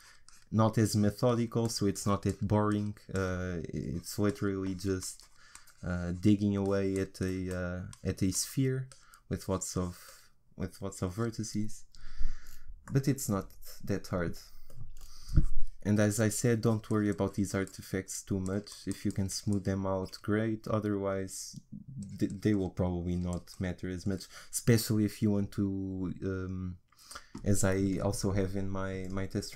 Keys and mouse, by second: 12.9-16.6 middle drag, 16.6-29.1 drag.